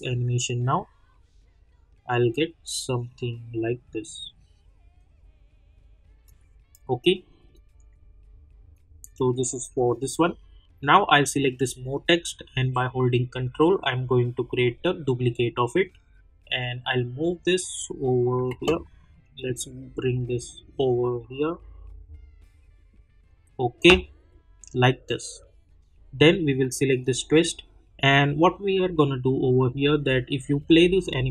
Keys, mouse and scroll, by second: 6.2 click, 13.1-16.9 ctrl+drag, 16.9-18.5 drag, 18.5 ctrl+z, 19.3-26.6 drag, 30.6 click.